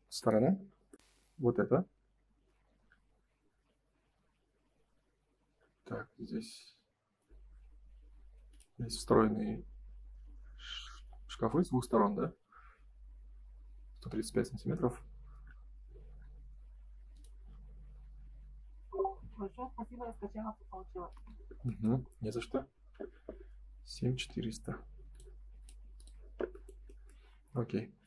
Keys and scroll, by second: 14.6 Escape, 20.6 Escape, 21.0 space.